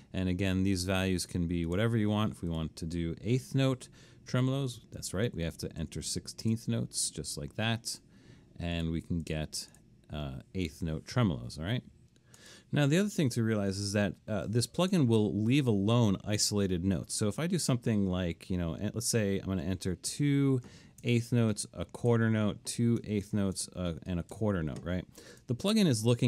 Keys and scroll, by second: 4.6-6.5 typing, 8.3 Escape, 13.1 BackSpace, 20.1-21.0 typing, 22.1-24.4 typing, 26.0 Escape.